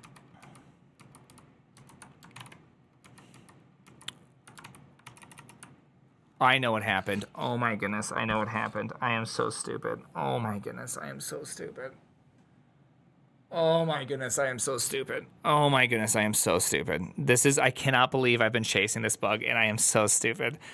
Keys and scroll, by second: 0.0-0.1 typing, 0.3 ctrl+k, 1.1 ctrl+k, 1.6 ctrl+j, 2.2 ctrl+w, 2.3 ctrl+o, 2.9 ctrl+k, 4.5 ctrl+k, 4.5 ctrl+w, 4.9 ctrl+c.